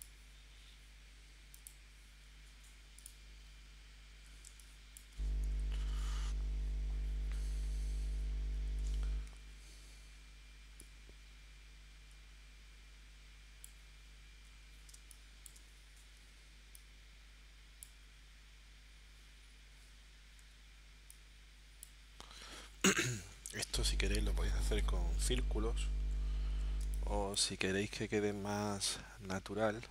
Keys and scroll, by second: 4.5 space, 8.7 l, 14.9 space, 20.4 v, 26.8 space.